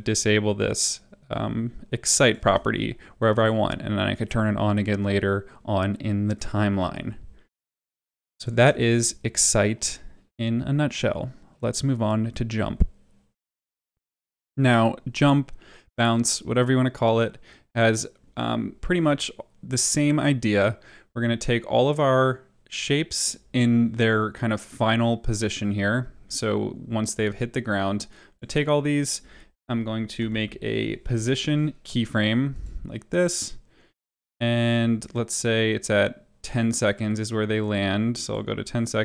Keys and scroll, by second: 2.4 space, 8.5 space, 13.8 space, 30.1 p.